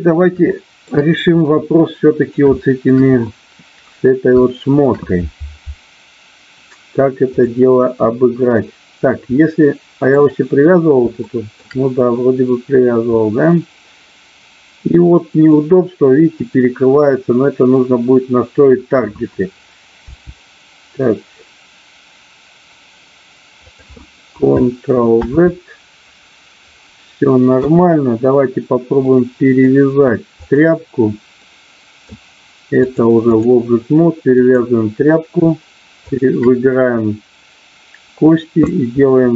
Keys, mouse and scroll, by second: 0.4 shift+middle click, 1.3-2.3 middle drag, 2.4 shift+middle click, 4.4 shift+middle click, 9.3 middle click, 11.2 shift+middle click, 13.2-15.6 middle drag, 16.4-17.6 drag, 20.1 g, 23.7 click, 26.4 ctrl+z, 27.6 KP_1, 29.1 middle click, 30.3 click, 31.3 middle click, 32.8 click, 34.3 click, 36.2 shift+click.